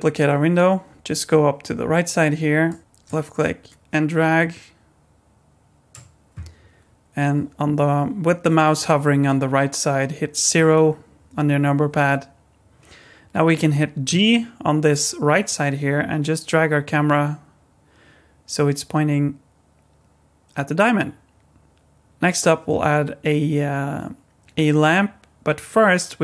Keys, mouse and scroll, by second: 2.7 click, 3.0 click, 10.5 KP_0, 14.1 g.